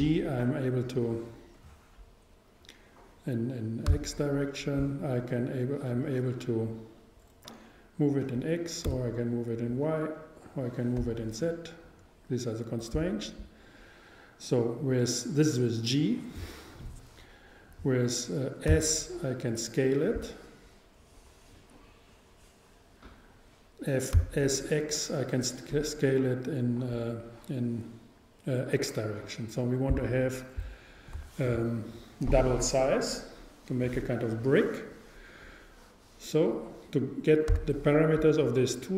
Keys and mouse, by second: 0.0 g, 13.1-15.0 drag, 18.7 s, 30.0-31.9 drag, 37.6 t.